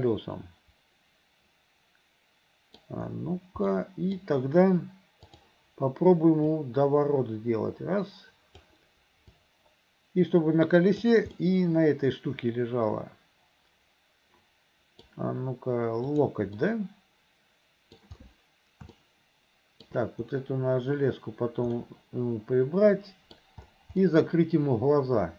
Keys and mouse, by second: 3.9 middle click, 5.4 click, 6.8-8.6 drag, 9.6-11.1 drag, 11.4-15.1 drag, 16.1 click, 16.7-18.1 drag, 19.0 shift+click, 19.0 shift+right click, 21.9-23.5 drag, 21.9-23.5 right drag, 24.2-25.3 drag, 24.2-25.3 right drag.